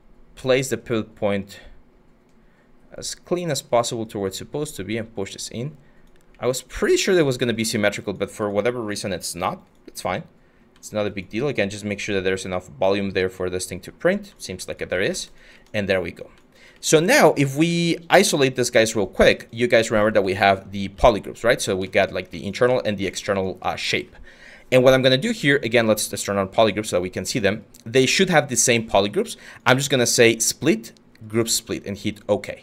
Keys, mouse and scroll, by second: 14.6 q, 20.6 ctrl+z.